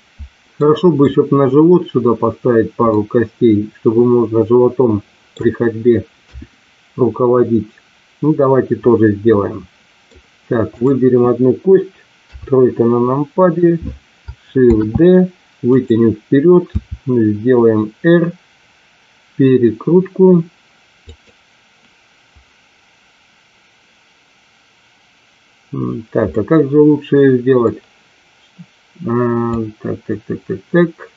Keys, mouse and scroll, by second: 0.5 middle click, 2.9-5.3 middle drag, 6.1 KP_1, 8.3-10.0 middle drag, 10.7 click, 12.2 KP_3, 14.5 shift+d, 15.7 click, 16.8 r, 20.9 click, 26.3-27.7 middle drag.